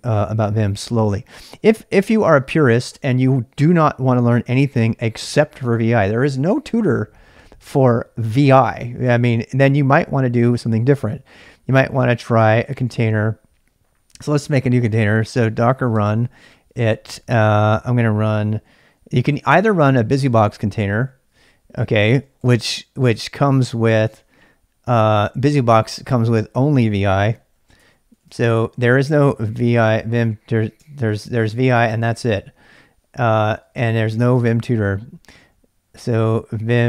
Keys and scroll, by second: 2.0 ctrl+[, 2.1 ctrl+j, 2.2-3.2 typing, 12.3-13.4 typing, 15.4-16.9 typing, 19.8-23.6 typing, 27.3-29.9 typing, 30.8 Return, 31.9 shift+z, 32.1 shift+z, 33.2-34.7 typing, 35.7-36.8 typing.